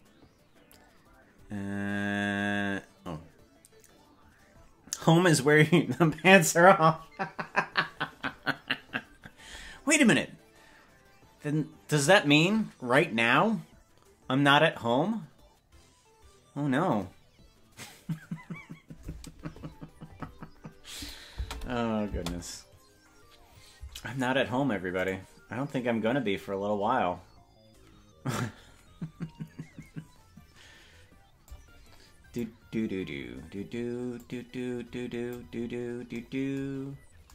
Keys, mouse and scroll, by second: 21.0 click, 21.3 space, 22.1 space, 25.1 right click, 31.5 click, 34.2-35.4 drag, 35.6-36.0 scroll up 7, 37.0-37.3 scroll up 2.